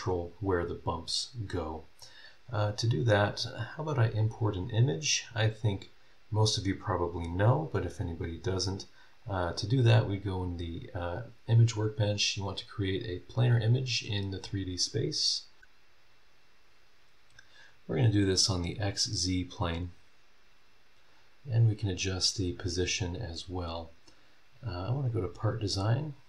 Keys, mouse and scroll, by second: 4.2 click, 9.1 click, 13.6-15.6 drag, 17.6 click, 18.8 click, 21.1 click, 23.7 click, 25.1 click, 26.1 scroll down 1.